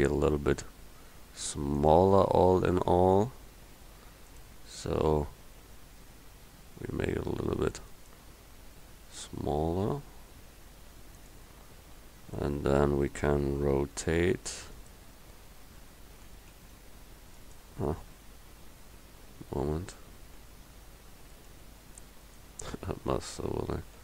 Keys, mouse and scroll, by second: 5.0 s, 9.3 s, 13.7 r, 16.3 r, 20.5 g, 22.3-24.0 drag.